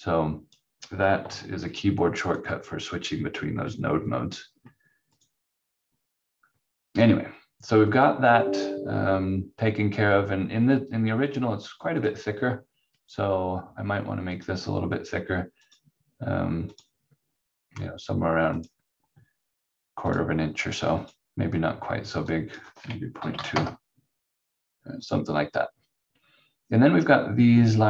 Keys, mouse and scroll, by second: 1.2 q, 2.3 click, 5.1 click, 12.0 click, 22.9-23.8 typing, 25.0 click.